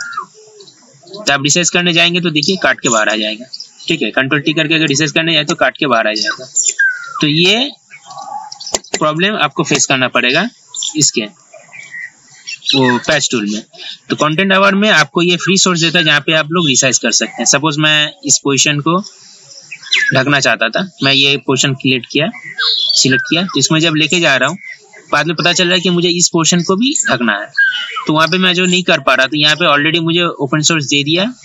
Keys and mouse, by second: 0.2-4.1 drag, 5.0 ctrl+z, 5.7 ctrl+z, 6.3 ctrl+z, 6.8 ctrl+z, 8.4 ctrl+z, 8.7 ctrl+z, 9.0 ctrl+z, 9.1 ctrl+z, 10.0 Return, 11.2 ctrl+z, 11.5 ctrl+z, 13.2 right click, 14.4-31.4 drag.